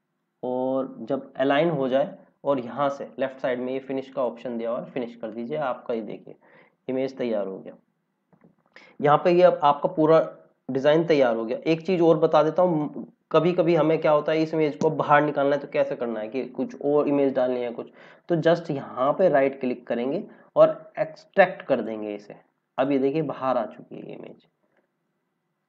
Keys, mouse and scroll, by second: 4.0 click, 5.8 scroll down 1, 11.0 click, 12.0 scroll up 1, 12.9 scroll down 1, 17.9-18.3 scroll down 1, 18.3 click, 19.0 right click, 21.6 click.